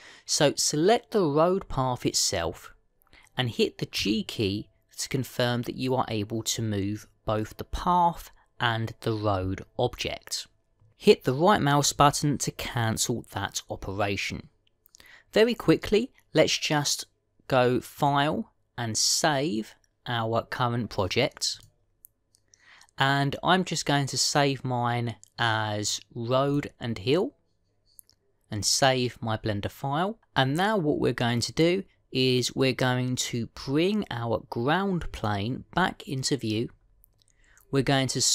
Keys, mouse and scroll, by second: 0.2 click, 4.8 g, 18.8 click, 36.0 click, 37.6-38.2 scroll down 1, 38.2-38.3 scroll down 6.